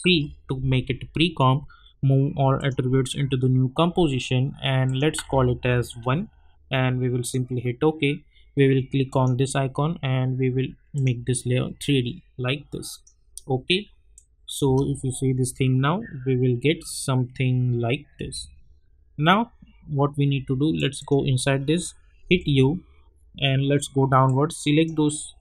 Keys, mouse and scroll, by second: 0.0 ctrl+shift+c, 2.5 click, 4.8 click, 5.1 ctrl+a, 5.9 1, 7.2 click, 14.6 space, 18.1 space, 20.7 click, 22.2 u, 23.1-24.2 scroll down 1, 24.2-25.4 drag.